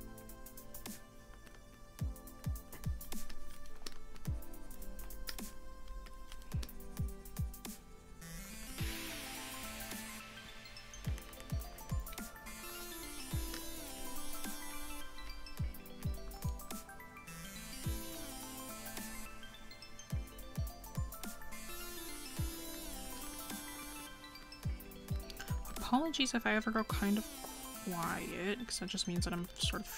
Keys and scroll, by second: 16.6 scroll up 1.